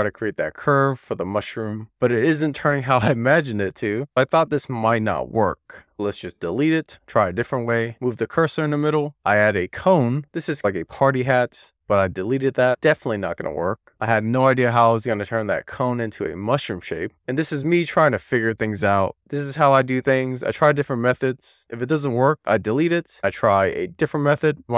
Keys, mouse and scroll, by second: 0.1 alt+z, 0.6 alt+z, 1.3 click, 1.9 click, 2.8 super+z, 3.2 click, 4.3 alt+z, 5.8 alt+middle click, 6.1 Tab, 6.9 x, 7.8-8.3 scroll up 3, 9.1 shift+right click, 9.2 shift+a, 10.3 Tab, 10.5 r, 11.1 e, 11.6 Tab, 11.9 click, 12.2 x, 17.2 shift+a, 21.0 e, 23.0 r.